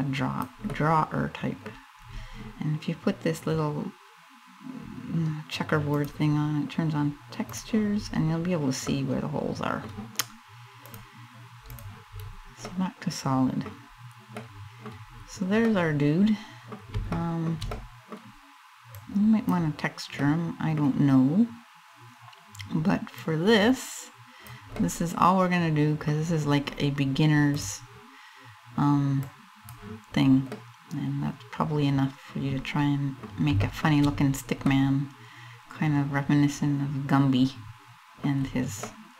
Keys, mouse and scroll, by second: 0.3 middle click, 1.4-1.9 scroll up 4, 5.5 click, 7.6 scroll up 3, 8.5 middle click, 10.5 click, 11.8 scroll down 3, 12.3 middle click, 13.5-13.8 scroll up 2, 14.0 middle click, 14.6-15.1 scroll down 3, 15.2 scroll up 1, 15.2 middle click, 16.5 scroll down 1, 16.8 shift+middle click, 17.4 middle click, 18.6 click, 19.8 middle click, 22.8 click, 24.4 middle click, 27.1 click, 28.9 click, 30.1 middle click, 33.3 shift+middle click, 34.0-34.3 scroll up 2, 34.3 middle click, 38.0-38.5 scroll down 3, 38.5 middle click.